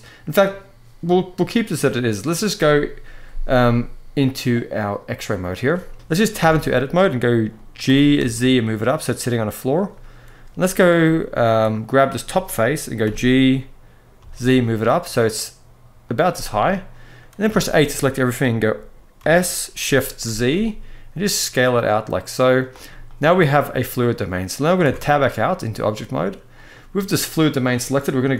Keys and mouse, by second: 1.3-1.7 middle drag, 4.7 click, 5.8 KP_1, 5.9 ctrl+z, 6.1 Tab, 7.6 g, 7.9 z, 9.5 click, 10.7 middle click, 11.6 click, 12.7 g, 13.9 z, 16.0 middle click, 17.2 a, 17.4 middle click, 19.0 s, 19.4 s, 19.5 s, 20.0 shift+z, 22.3 click, 22.6 middle click, 24.6 Tab, 26.3 click.